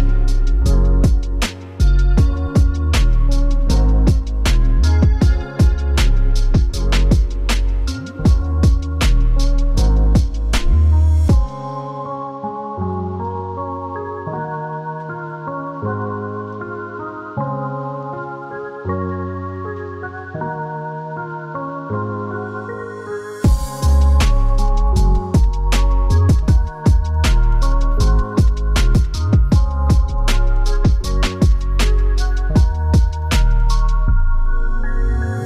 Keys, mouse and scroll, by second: 0.0 shift+middle click, 1.0 click, 3.2-3.7 scroll up 1, 3.7 right click, 3.7 scroll up 1, 4.3 click, 5.8 right click, 6.2 click, 7.0 right click, 7.5 click, 8.9 right click, 9.4 click, 10.8 right click, 11.0 click, 12.1 right click, 12.5 click, 13.5 right click, 14.1 click, 15.0-15.4 scroll down 1, 15.5 right click, 15.9 right click, 16.3 scroll up 2, 16.8 right click, 18.4 click, 19.8 right click, 20.3 click, 21.9 right click, 22.5 click, 23.7 right click, 24.3 click, 25.3 right click, 25.9 click, 27.5-28.2 scroll down 2, 28.2 right click, 28.7 click, 29.9 click, 32.4 right click, 33.1 g.